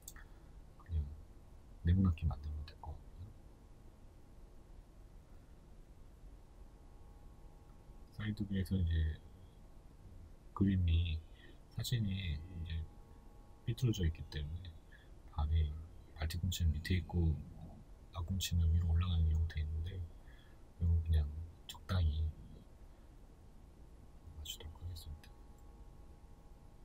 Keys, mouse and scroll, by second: 5.5-6.1 scroll, 6.5 g, 9.3 Tab, 9.7-10.9 middle drag, 10.7 3, 10.9 right click, 11.5-14.7 middle drag, 12.2 KP_3, 13.3 g, 14.7 right click, 15.1 o, 18.1 Tab, 23.9-24.6 drag, 24.6-26.8 shift+middle drag.